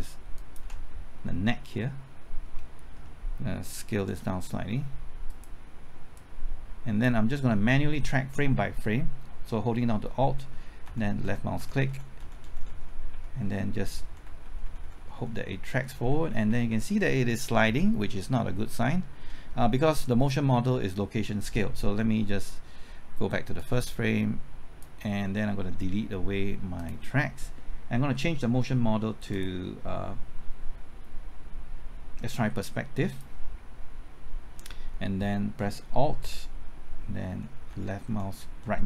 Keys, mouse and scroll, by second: 0.4 ctrl+alt+click, 1.8-3.3 middle drag, 4.1 s, 5.3-7.3 drag, 10.2 typing, 10.9 alt+Right, 11.2 alt+Right, 11.6 alt+Right, 11.9 alt+Right, 12.2 alt+Right, 23.6-25.3 drag, 28.3 middle click, 29.3-30.3 drag, 37.3 alt+Right, 37.7-38.8 typing.